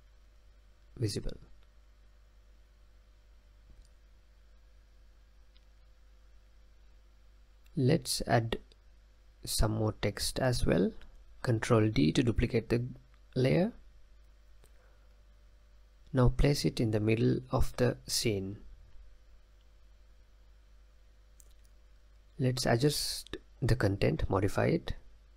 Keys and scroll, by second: 0.7 space, 2.9 space, 14.2 ctrl+d.